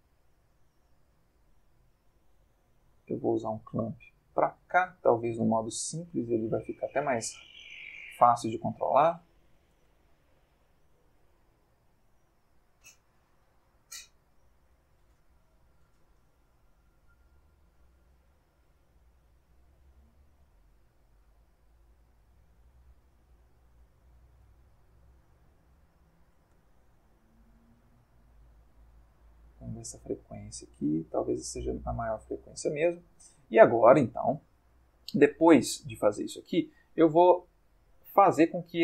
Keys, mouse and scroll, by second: 1.9-3.8 drag, 5.6 click, 8.2-9.5 drag, 9.8 Escape, 10.2-11.3 drag, 11.3 Escape, 12.9 click, 13.6-18.4 drag, 19.7 click, 21.2-24.6 drag, 25.1-27.1 drag, 26.5 Escape, 27.5-28.9 drag, 29.4-32.9 drag, 33.3 click, 35.9-38.8 middle drag.